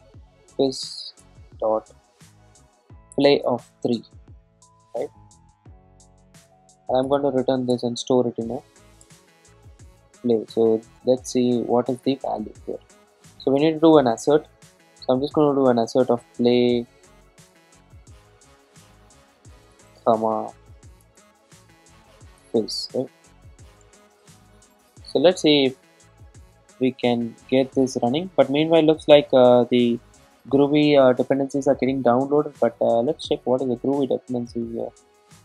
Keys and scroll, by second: 1.3 Return, 7.1 Return, 7.9 alt+Return, 16.6 Return, 26.8 super+s.